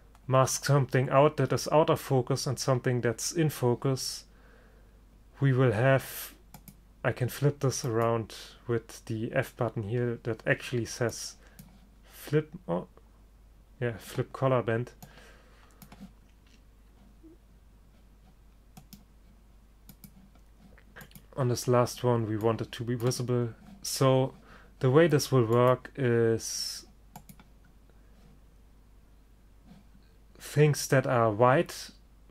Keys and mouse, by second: 6.7-9.7 drag, 11.2-13.1 drag, 15.1 click, 18.9-20.7 right drag, 20.7-23.0 drag, 25.7-27.5 drag.